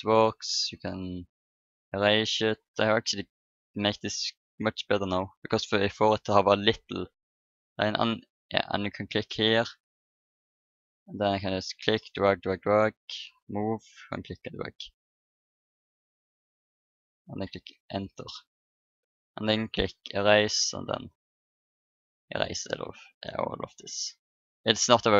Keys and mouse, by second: 0.7-2.5 drag, 8.8-12.7 drag, 13.0-14.9 middle drag, 19.8-21.7 drag.